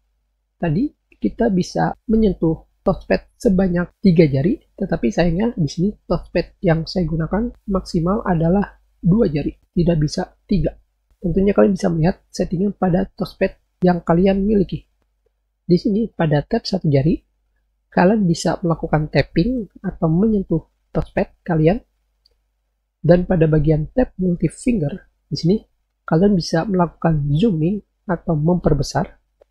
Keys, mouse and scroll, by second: 24.6 click.